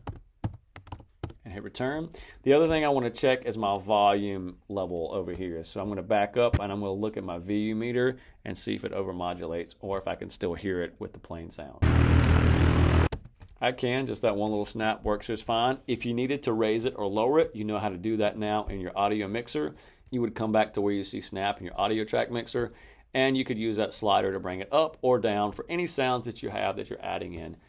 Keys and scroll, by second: 0.0-1.3 typing, 11.7 space, 13.0 space.